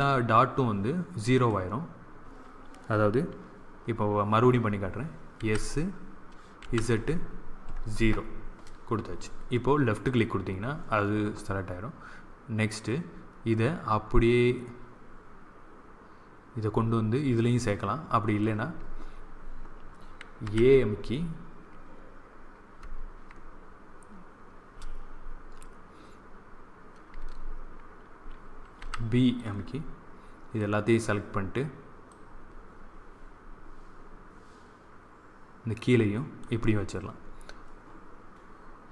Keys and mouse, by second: 5.3 s, 12.8-14.7 drag, 20.3 a, 28.7 b, 32.1-33.9 drag.